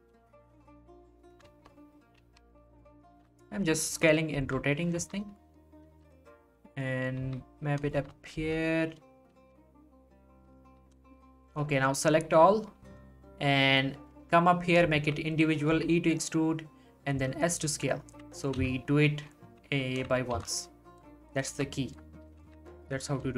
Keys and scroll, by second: 0.0 s, 0.1 g, 2.2 g, 3.1 s, 4.4 r, 5.0 s, 5.9 g, 7.2 s, 8.3 r, 9.3 g, 15.7 e, 17.1 s, 18.6 z, 20.3 z, 21.5 z, 22.4 z.